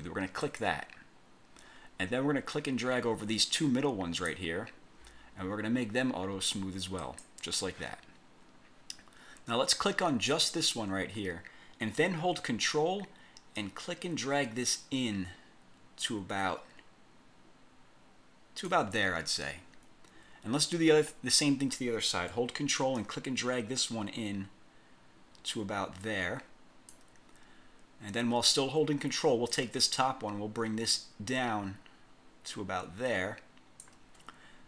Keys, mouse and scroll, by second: 0.5 click, 2.7-4.7 drag, 7.2 click, 10.5 click, 13.7-19.0 ctrl+drag, 23.1-27.3 ctrl+drag, 29.7-34.1 ctrl+drag.